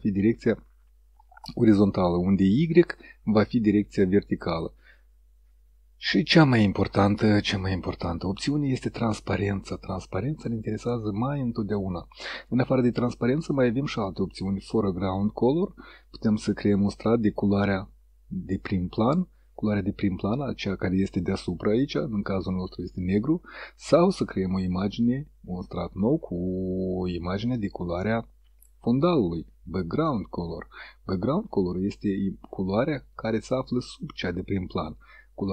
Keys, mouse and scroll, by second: 12.4 click, 22.8 click, 24.4 click.